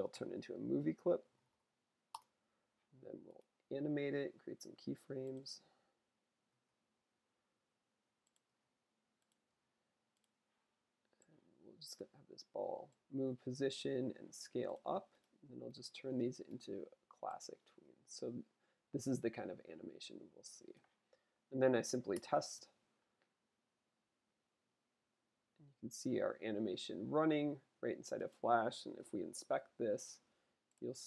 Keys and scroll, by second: 0.1 F8, 0.8-1.9 typing, 6.4 F5, 8.4 F6, 9.4 F6, 12.1 q, 28.9 j.